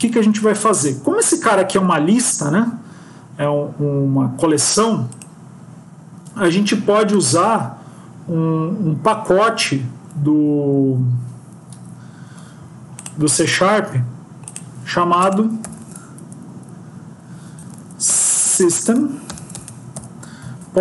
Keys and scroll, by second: 17.8 Down, 18.0 Return.